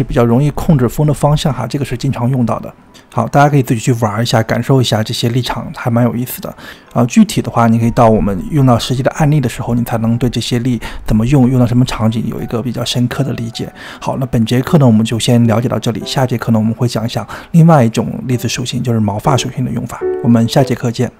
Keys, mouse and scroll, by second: 3.1 space.